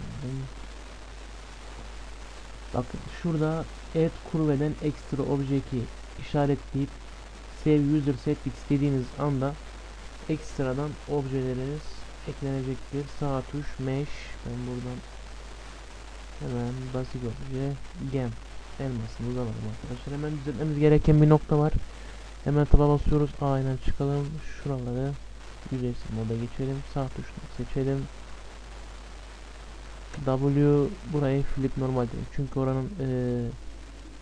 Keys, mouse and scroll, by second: 10.4 Return, 11.3 Return, 11.3 Delete, 12.4 shift+a, 15.8 shift+a, 18.6-21.2 middle drag, 21.7 Tab, 22.4-25.7 middle drag, 23.2 a, 25.7-27.3 drag, 26.7-31.5 right drag, 30.2 w, 32.9-34.2 middle drag, 33.3 Tab.